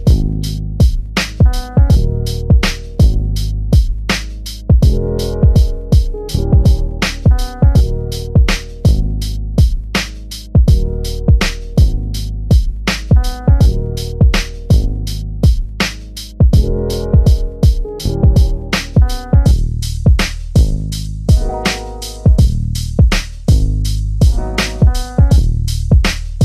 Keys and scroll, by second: 2.4 shift+c, 3.8 shift+3, 4.4 3, 13.9 3, 19.9 3, 23.6 3.